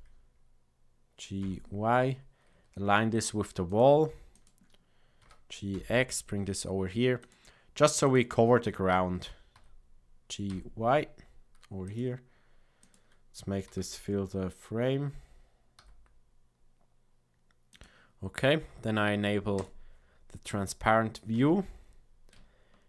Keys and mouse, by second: 4.4 click, 5.2 g, 8.0 click, 8.9 g, 12.7 click, 13.6 g, 19.5 click, 21.3 Tab.